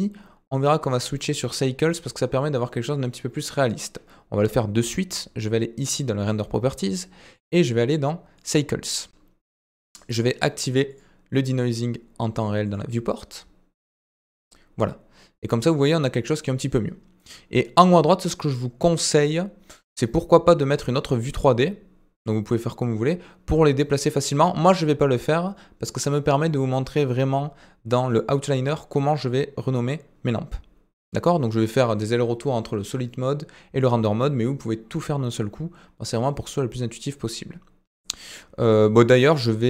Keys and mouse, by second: 6.2 click, 7.3-8.5 drag, 10.9 click, 15.6 click, 17.8 click, 19.8-20.8 drag, 24.6-28.2 drag.